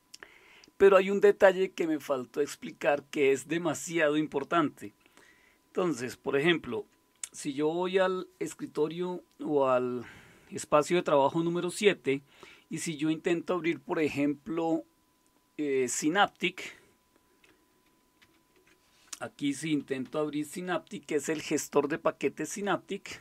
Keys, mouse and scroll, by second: 6.7 super+7, 18.2 alt+super+d, 19.4-20.5 typing.